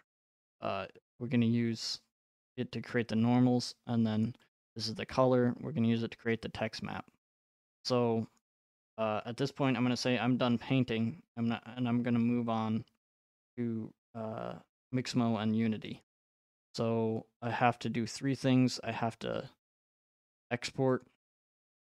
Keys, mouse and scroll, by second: 4.5 click, 8.1-9.9 scroll, 9.9 right click, 9.9-10.5 scroll, 11.0-11.6 scroll, 11.6-12.0 scroll, 21.0 click.